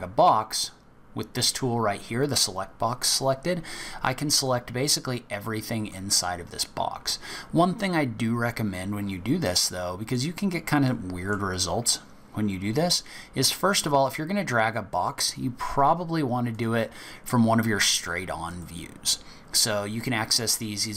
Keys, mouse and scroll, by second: 4.4 click, 9.4 middle click, 10.3 scroll down 4, 10.9 middle click, 16.5 click, 18.5 click.